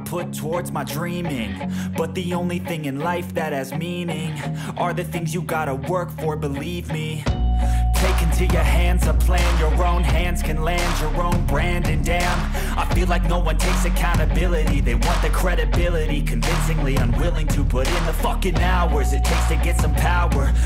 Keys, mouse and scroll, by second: 1.4 click, 2.6-2.9 typing, 4.0-5.7 typing, 7.5 click, 7.8 click, 9.6 click, 10.7 click, 20.0 n.